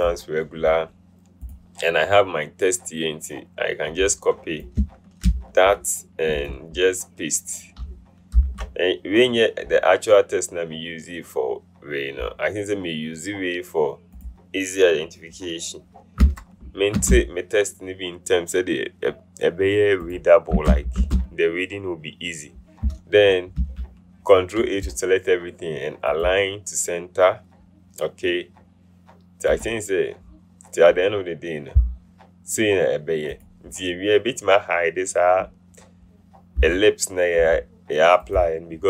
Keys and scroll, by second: 5.4 ctrl+c, 8.5 ctrl+v, 16.4 Return, 17.1 Return, 20.7 Return, 21.1 Return, 23.7 ctrl+a.